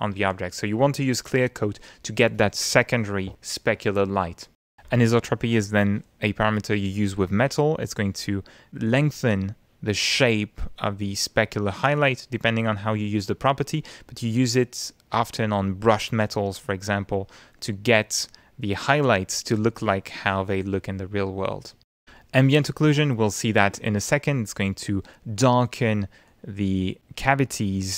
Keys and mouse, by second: 27.0 click.